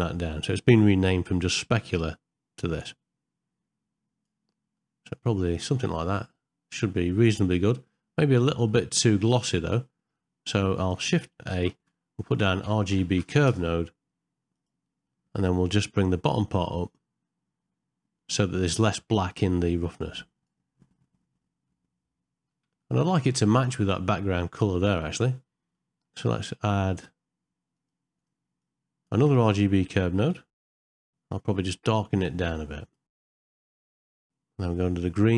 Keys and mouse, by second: 4.7 middle click, 5.4 ctrl+middle click, 5.7-6.8 middle drag, 7.3-8.3 ctrl+middle drag, 8.7 shift+middle click, 10.2 middle click, 10.8 click, 11.5 shift+a, 15.1 middle click, 19.0-20.4 drag, 21.6 middle click, 22.8 ctrl+middle click, 23.2 shift+middle click, 23.6 middle click, 25.8 middle click, 26.7 click, 27.7 click, 28.2 click, 28.6 click, 29.2 middle click, 29.4 shift+a, 30.0 BackSpace, 30.2 BackSpace, 32.2 click, 33.1 click, 33.7 click, 33.9 click, 34.0 click.